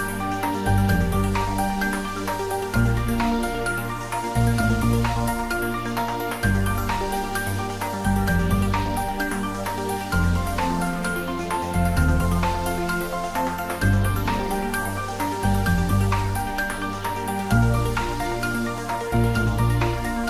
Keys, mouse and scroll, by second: 0.3 click, 3.9 click, 8.5 r, 12.2 o, 14.6 click, 17.6 click.